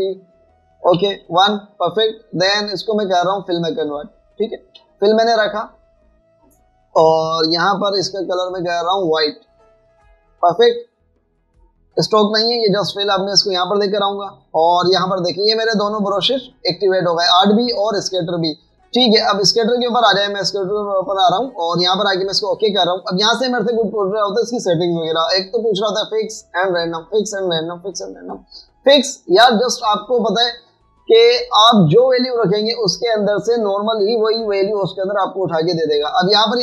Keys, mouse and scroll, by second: 2.0 typing, 5.8 typing, 6.5 double click, 12.6 double click, 28.5 double click, 31.1 double click.